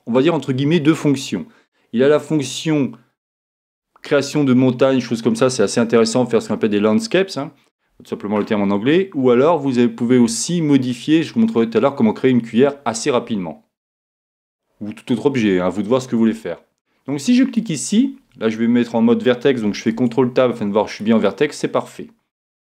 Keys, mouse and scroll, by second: 14.2-16.2 middle drag, 17.5-19.5 right drag, 19.9 ctrl+Tab.